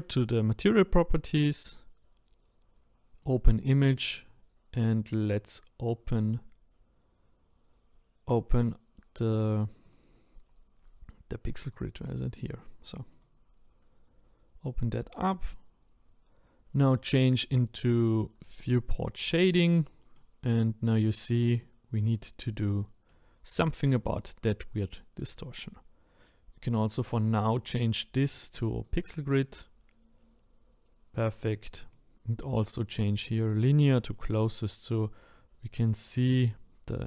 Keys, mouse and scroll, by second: 3.4-13.2 drag, 19.3 click, 20.1 middle click, 20.7-21.6 scroll up 1, 21.6 middle click, 22.3-22.7 scroll down 1, 22.7-27.9 middle drag, 27.9 click, 31.6-34.8 drag, 34.8-35.5 scroll up 1, 35.6-37.0 middle drag.